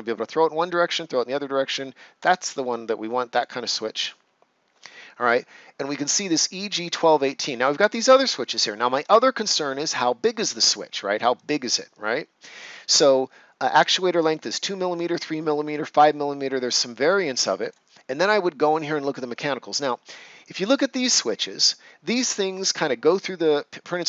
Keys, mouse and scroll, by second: 2.1 click, 4.9 scroll down 1, 6.9 scroll down 1, 11.3-14.9 drag, 16.7-18.5 drag, 18.5 scroll down 1.